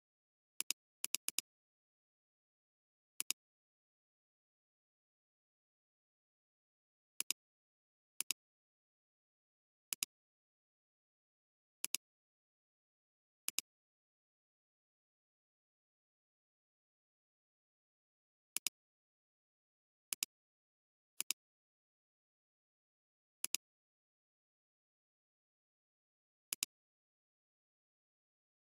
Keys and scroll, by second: 3.1 alt+space, 3.8 alt+space, 21.1 alt+space.